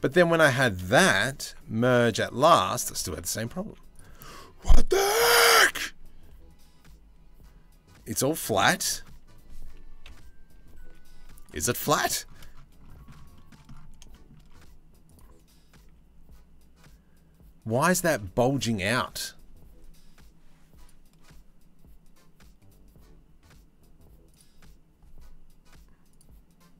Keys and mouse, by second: 1.0 m, 2.7 ctrl+z, 8.8 3, 9.6 KP_3, 10.4 z, 11.6 1, 12.9 shift+middle click, 13.7 middle click, 14.7 click, 15.4 a, 24.0-25.8 drag.